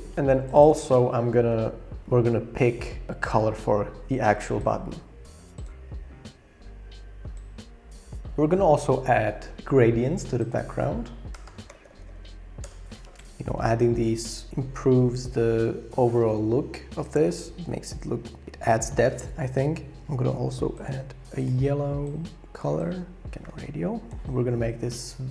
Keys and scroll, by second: 11.3 shift+a, 12.6 Return, 18.0-18.4 shift+scroll, 18.4 shift+Up, 18.6 shift+Down.